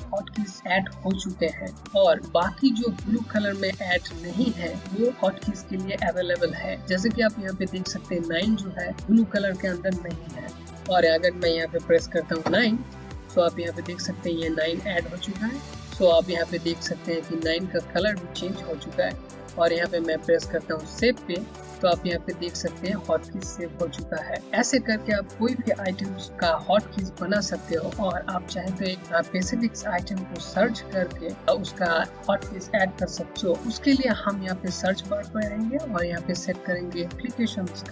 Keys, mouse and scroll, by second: 12.3 KP_9, 20.8 click, 36.6 click.